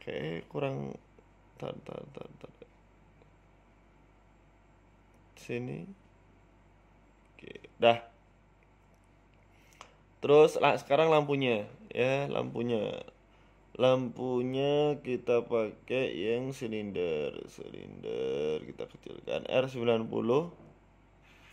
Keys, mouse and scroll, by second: 0.6 middle click, 1.4 g, 2.8 middle click, 3.2 KP_3, 3.8 KP_1, 4.7 Tab, 5.1 Tab, 5.7 g, 7.2 KP_3, 8.0 g, 9.3 KP_1, 9.3 KP_2, 9.8 KP_1, 10.2-10.6 scroll down 5, 10.4 shift+middle click, 11.4 Tab, 11.6 right click, 12.0 shift+s, 13.2 shift+a, 15.5 shift+a, 18.4 s, 19.5 s, 20.7 r.